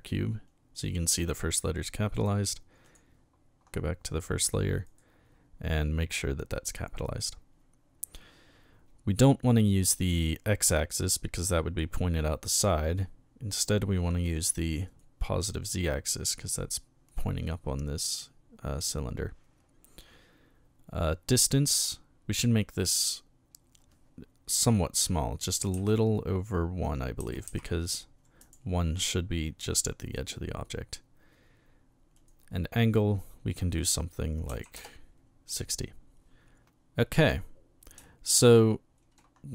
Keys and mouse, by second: 2.9 click, 4.4 right click, 4.8 right click, 12.5 click, 14.9 click, 21.8 click, 25.8 KP_1, 27.5 KP_1, 28.4 click, 32.2 click, 34.5 KP_6, 35.5 click.